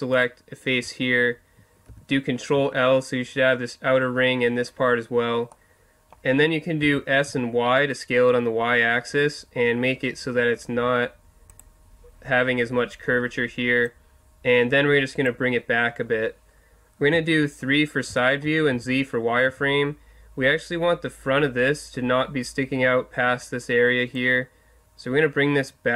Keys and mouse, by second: 1.9 ctrl+l, 5.5 middle click, 6.8 s, 6.8-10.0 middle drag, 11.6-13.4 drag, 13.9-15.4 drag, 15.7-17.1 middle drag, 17.1 KP_3, 18.7 z, 19.4 z, 24.1-25.9 drag.